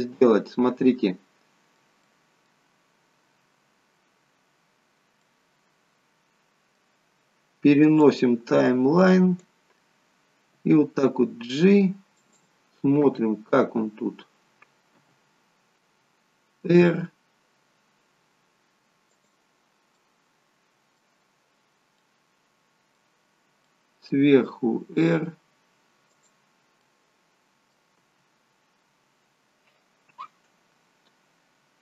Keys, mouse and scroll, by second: 0.2 middle click, 2.0 middle click, 5.1 middle click, 8.0 click, 10.6 g, 12.9 KP_0, 14.9 KP_0, 16.6 r, 19.9 middle click, 21.6 scroll up 2, 21.9 middle click, 23.1-23.8 scroll down 5, 23.6 middle click, 24.4 r, 26.8 middle click.